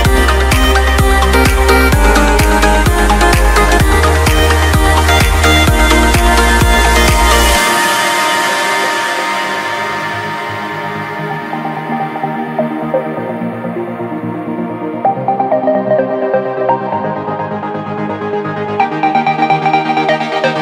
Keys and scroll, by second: 2.7 BackSpace, 6.7 Home, 7.4 Home, 8.1 BackSpace.